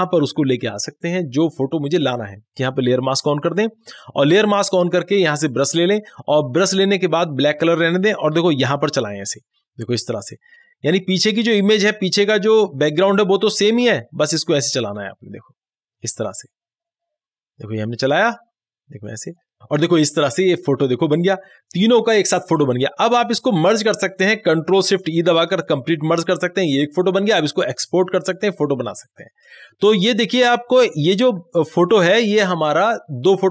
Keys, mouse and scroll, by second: 3.3 click, 5.7 click, 8.8 click, 8.9-18.9 drag, 25.4 ctrl+shift+e.